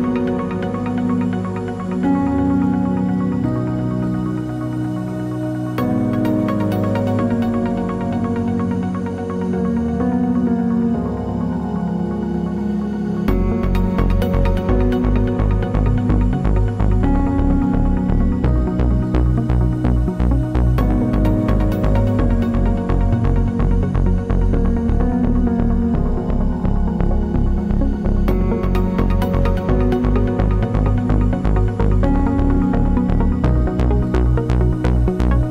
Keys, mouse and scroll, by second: 5.0 t, 5.6 click, 6.2-9.2 typing, 10.1 click, 10.8 ctrl+a, 11.4-12.8 typing, 14.3 click, 16.0 KP_2, 16.1 KP_0, 16.3 KP_Enter, 17.9 click, 21.8 KP_2, 22.3 KP_Enter, 23.5 click, 24.2 KP_1, 24.4 KP_8, 24.6 KP_Enter, 26.8 click, 29.6 ctrl+click, 31.7 click, 32.0 ctrl+d, 33.4 Left, 35.2 ctrl+g.